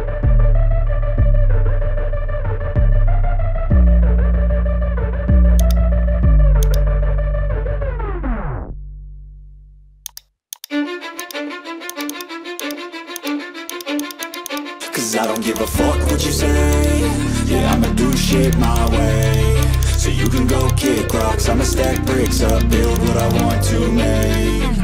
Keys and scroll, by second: 8.2-8.9 [, 9.3 [.